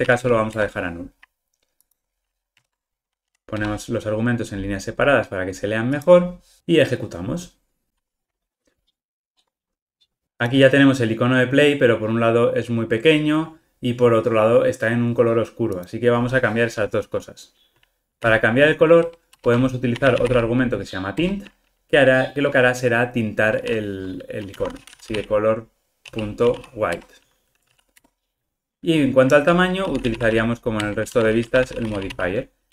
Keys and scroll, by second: 0.5 Return, 2.5 alt+Return, 7.3 ctrl+r, 21.2 Return, 28.7 Escape, 30.8 Return.